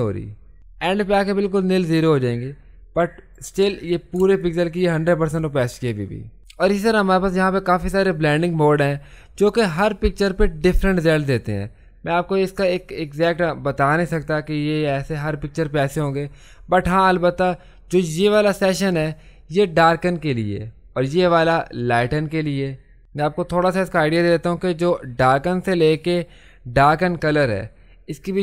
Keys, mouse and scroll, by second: 4.7 ctrl+space.